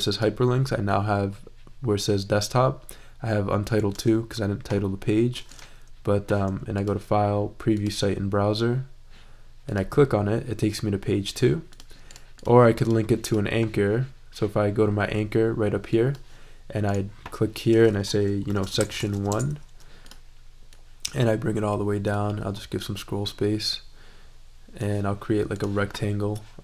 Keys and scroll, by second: 18.2-19.6 typing.